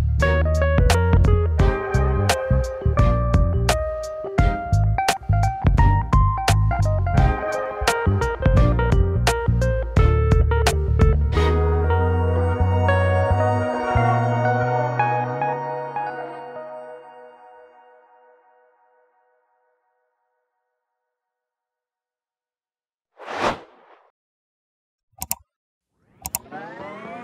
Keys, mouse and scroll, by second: 15.6 scroll down 6, 16.0-16.7 scroll up 12, 17.7 scroll down 2, 18.2-25.9 shift+middle drag, 25.9-27.2 drag.